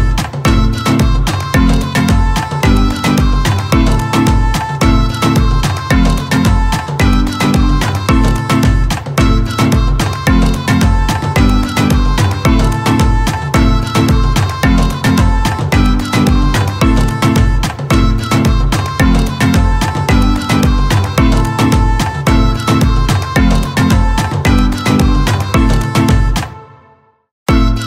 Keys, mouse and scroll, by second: 13.5-16.6 drag, 16.6-19.9 typing.